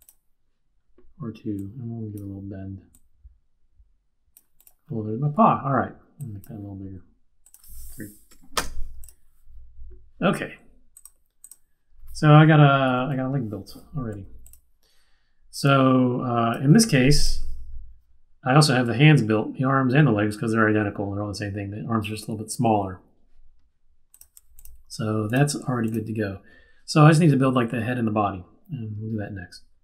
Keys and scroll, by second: 8.3 3, 8.5 Return, 12.8 super+-, 14.0 q, 16.7 super+z.